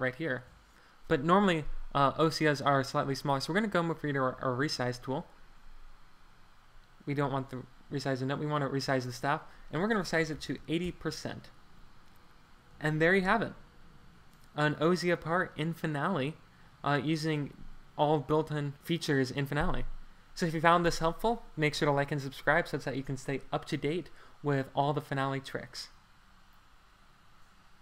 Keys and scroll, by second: 9.9-10.9 typing, 10.9 super+Return, 12.7 Escape.